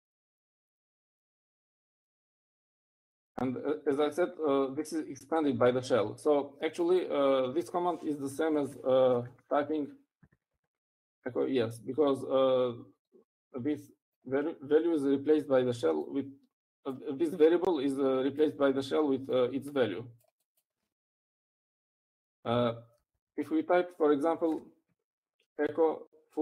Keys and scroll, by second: 9.6-12.3 typing, 24.3 Up, 24.5 Up, 26.3 1.